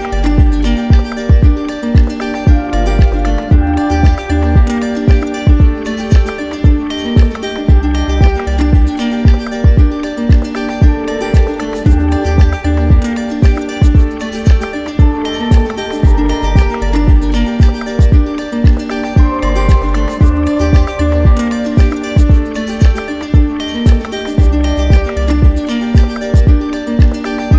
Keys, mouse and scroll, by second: 0.0 shift+click, 0.5 shift+click, 1.2 shift+click, 1.8 shift+click, 2.3 shift+click, 2.7 shift+click, 3.1 shift+click, 5.5 alt+click, 5.6 alt+right click, 6.9 right click, 8.0 right click, 8.3 right click, 8.9 click, 9.5 click, 10.1 click, 10.6 right click, 11.3 alt+click, 12.4-13.8 typing, 15.5 alt+right click, 16.4 right click, 17.5 alt+right click, 21.1 right click, 21.3 right click, 21.4 alt+click, 21.5 right click, 21.5 z, 21.7 right click, 21.8 click, 22.0 right click, 22.1 ctrl+z, 22.1 right click, 22.2 right click, 22.4 ctrl+z, 22.4 click, 22.4 right click, 22.7 click, 22.8 right click, 22.9 click, 23.0 right click, 23.2 click, 23.2 right click, 23.3 right click, 23.3 shift+click, 23.4-23.8 click, 23.5 click, 23.6 click, 23.7 click, 24.0 right click, 24.1 click, 24.1 right click, 24.2 shift+click, 24.2 click, 24.4 click, 24.4 right click, 24.5 right click, 24.7 click, 24.8 shift+click, 24.9 alt+click, 25.0 right click, 25.2 shift+click, 25.3 click, 25.4 click, 25.5 click, 25.6 shift+click, 25.7 shift+click, 25.8 shift+click, 25.9 shift+click, 26.1 click, 26.1 shift+click, 26.2 click, 26.2 click, 26.6 right click, 26.7 click, 26.8 click, 26.9 ctrl+z, 26.9 right click, 27.1 click, 27.1 right click, 27.2 shift+click, 27.3 right click, 27.4 click, 27.5 shift+click.